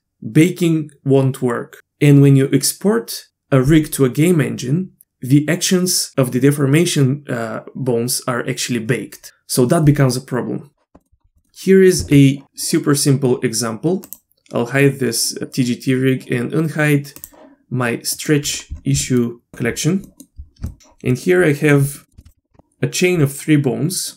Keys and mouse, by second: 11.0 middle click, 11.4 middle click, 12.0 Tab, 14.1 click, 17.2 click, 18.2 middle click, 19.0 middle click, 19.5 KP_Divide, 19.5 middle click, 19.5 a, 20.0 middle drag, 20.7 shift+middle click, 21.1 middle click, 21.9 middle click, 22.1 middle click, 22.3 drag.